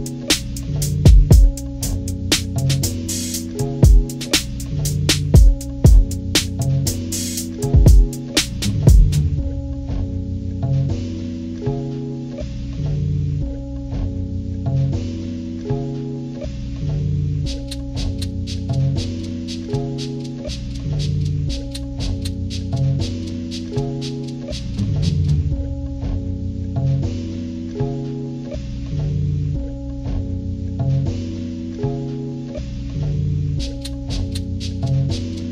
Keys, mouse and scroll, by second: 0.8 Delete, 1.9-4.0 drag, 6.0-8.9 drag, 11.5-13.1 alt+shift+drag, 14.4 click, 16.8-18.7 alt+shift+drag, 20.0 click, 23.4-25.1 drag, 29.0 click, 29.2-32.1 drag, 32.9-35.5 drag.